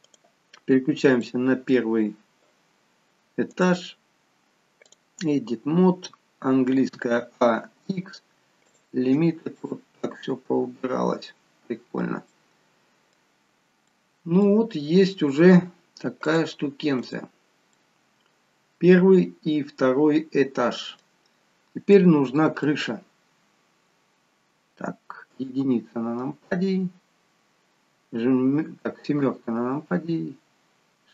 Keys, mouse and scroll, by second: 1.2 middle click, 3.4 click, 6.9 a, 7.5 x, 9.5 middle click, 12.3 middle click, 13.4-14.0 scroll up 2, 13.8 middle click, 14.7-15.5 scroll down 2, 16.3 click, 17.7 middle click, 21.5-22.1 scroll down 2, 21.9 middle click, 25.3 KP_1, 26.5-26.9 scroll up 1, 28.3-29.1 scroll up 2, 29.1 KP_7.